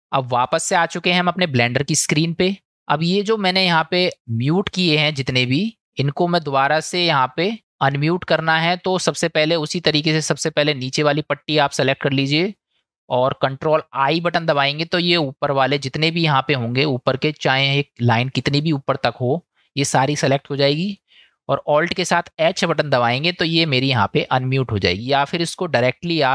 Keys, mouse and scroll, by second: 14.5 ctrl+i, 22.6 alt+h.